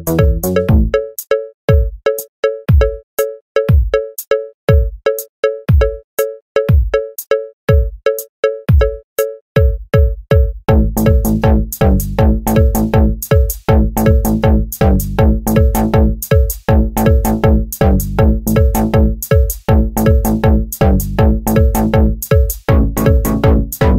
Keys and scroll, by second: 14.5-19.8 typing, 23.8-23.9 typing.